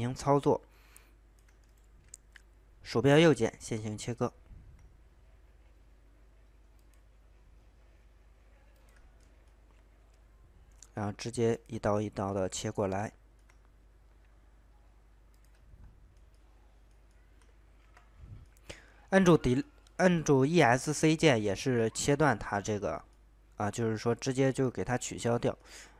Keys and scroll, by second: 17.8 Escape.